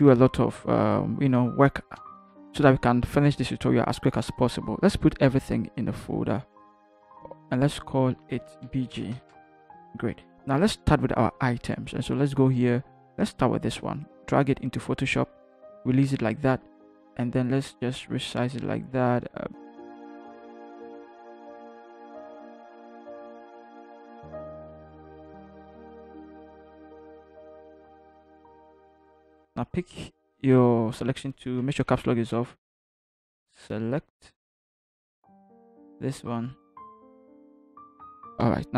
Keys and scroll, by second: 2.0 v, 6.7 ctrl+g, 8.2 Caps_Lock, 8.9 b, 9.1 g, 9.3 Return, 22.9 Return, 28.9 shift+Up, 29.0 shift+Up, 29.2 shift+Return, 31.8 Caps_Lock.